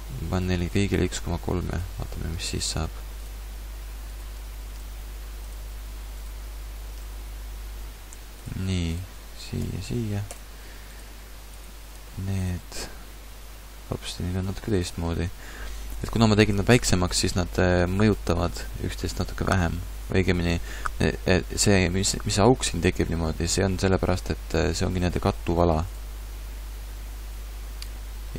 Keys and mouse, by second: 0.7 right click, 1.7-4.1 middle drag, 7.4 click, 8.1 Tab, 8.4-9.6 drag, 9.6 ctrl+p, 12.0 ctrl+Tab, 12.8 r.